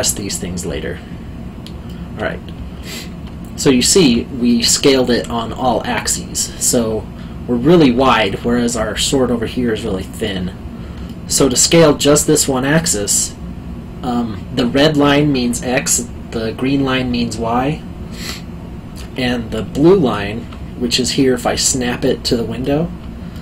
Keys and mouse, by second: 1.8 middle click, 3.5 middle click, 7.9 alt+middle click, 10.0 alt+middle click, 11.1 alt+middle click, 18.9 middle click, 21.3 middle click, 21.8 alt+middle click.